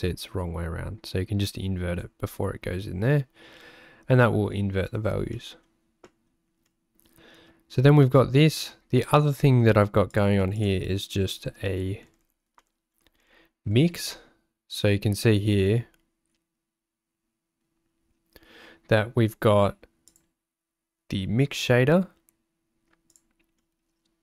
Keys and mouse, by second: 1.7 click, 5.5 middle click, 6.1 middle click, 6.7 middle click, 9.2 middle click, 10.1 click, 10.6 shift+click, 12.7 shift+middle click, 20.1 click, 23.7 middle click.